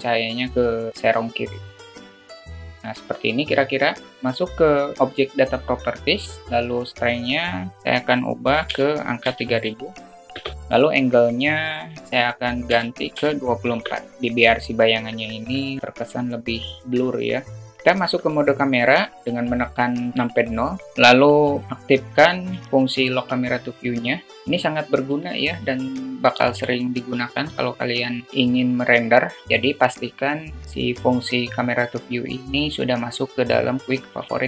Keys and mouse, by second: 2.5 click, 5.3 click, 7.5-10.2 drag, 9.7 0, 11.0-13.9 drag, 17.9 KP_0, 22.5 q, 28.3-29.0 drag.